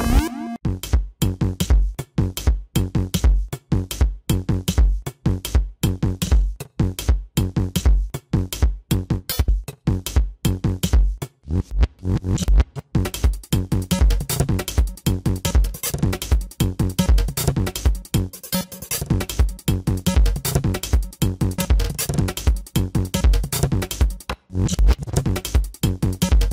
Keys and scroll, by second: 0.7 space, 2.3 ], 4.2 space, 9.8 ctrl+=, 10.1 ctrl+=, 11.0 ctrl+=, 14.4 ctrl+=, 18.4 ctrl+-, 18.9 space, 19.6 ctrl+-, 20.4 ctrl+-, 20.6 ], 21.7 space, 26.0 space.